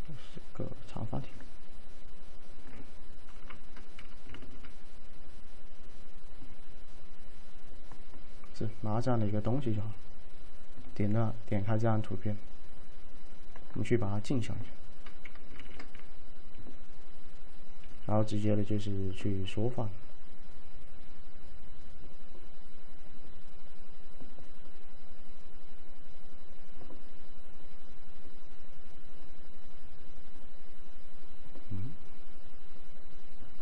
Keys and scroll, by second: 3.4 F5, 15.7 ctrl+a.